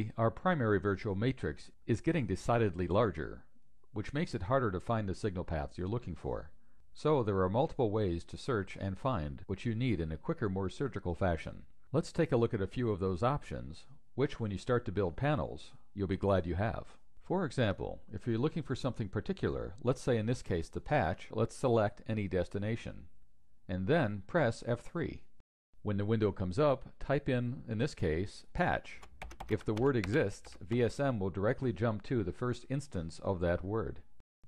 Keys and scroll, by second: 23.8 F3.